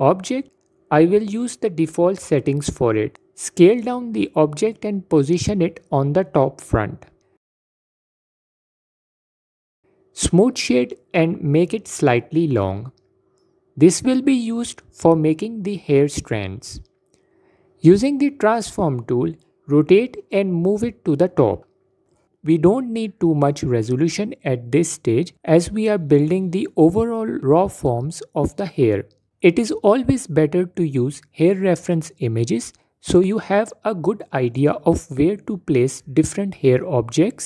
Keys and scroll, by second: 4.1 s, 7.6 ctrl+z, 11.2 s, 14.1 s, 23.4 F4, 26.2 F4.